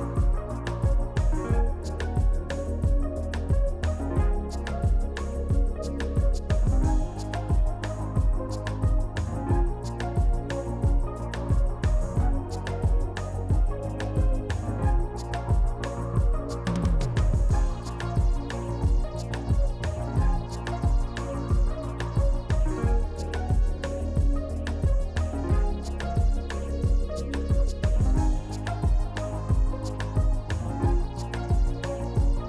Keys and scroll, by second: 3.8 s, 11.1 s, 14.5 F4, 15.1 s, 17.3 s, 21.2 s, 22.3 s, 22.7 s, 24.1 s, 26.3 s, 28.0 shift+r, 31.7 F4.